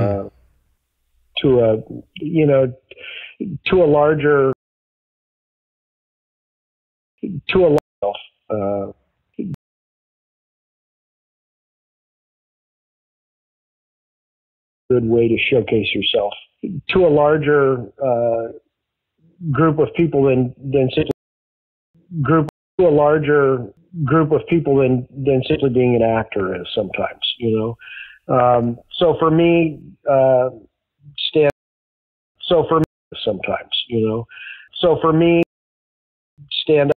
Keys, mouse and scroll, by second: 3.9 click, 4.4 space, 4.8-6.2 drag, 6.9 ctrl+shift+Delete, 7.1 space, 7.7 space, 7.9 click, 7.9 space, 9.5 space, 10.5 click, 11.8 click, 13.0-14.0 drag, 14.7 click, 14.8 space, 17.6 ctrl+s, 19.4-21.1 drag, 21.0 space, 21.6 ctrl+shift+Delete, 21.9 space, 22.4 space, 22.6 click, 22.7 space, 24.6 ctrl+s, 25.4-26.6 drag, 26.9 click, 28.0 click, 28.9 click, 30.3-31.4 drag, 31.4 space, 32.0 ctrl+shift+Delete, 32.3 space, 32.7 space, 32.9 click, 34.3-35.3 drag, 35.3 space, 36.0 ctrl+shift+Delete, 36.3 space, 36.8 space.